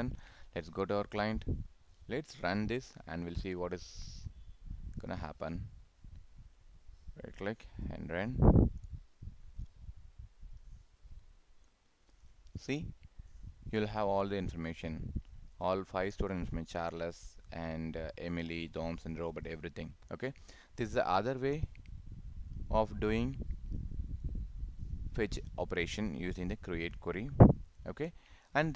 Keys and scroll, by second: 3.4 ctrl+s.